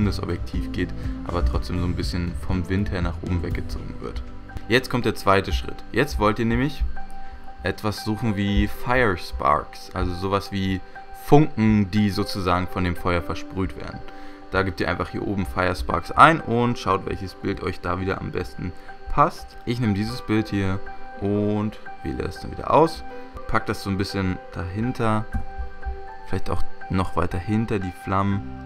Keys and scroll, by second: 3.5 v, 25.5 Return.